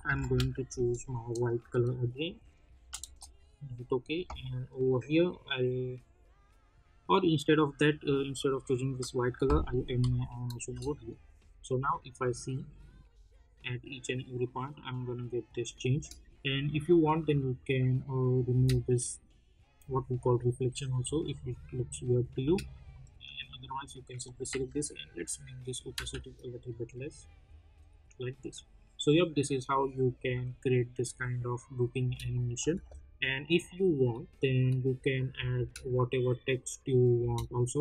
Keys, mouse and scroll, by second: 0.0 ctrl+shift+y, 1.8 click, 2.8 Return, 4.1-10.0 drag, 10.0 n, 10.6 space, 15.9 space, 17.1 click, 18.5 space, 22.4 space, 22.9 click, 24.5 t, 25.2 click, 25.9 space, 32.0 space, 32.3 click, 32.7 u, 33.6 click, 35.5 space.